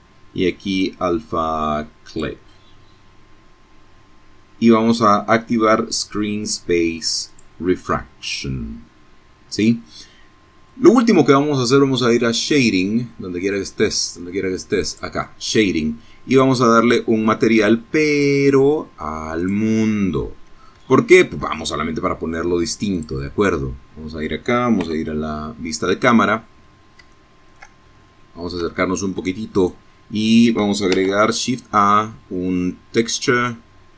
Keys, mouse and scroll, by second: 0.1 click, 5.3 click, 12.8 click, 14.8-15.1 scroll down 1, 16.1 click, 17.4 click, 18.4 scroll up 1, 18.8 shift+middle click, 19.9 scroll down 2, 21.0 middle click, 22.8 KP_0, 25.1 shift+middle click, 25.8-26.5 shift+scroll up 3, 26.7 shift+middle click, 27.6 shift+click, 28.2 click, 28.9 shift+a, 32.5 click.